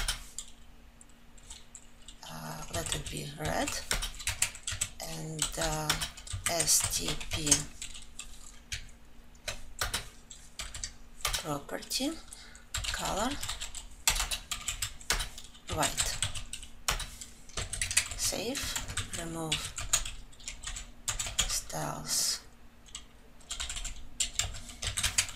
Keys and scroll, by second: 7.9 ctrl+j, 11.7 Return, 14.4 Return.